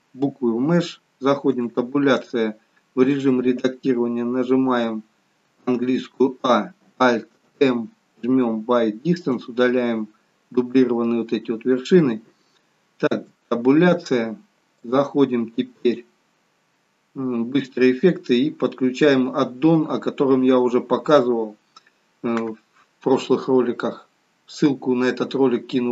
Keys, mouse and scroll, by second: 5.4 a, 7.4 alt+m, 13.1 Tab, 14.8 click.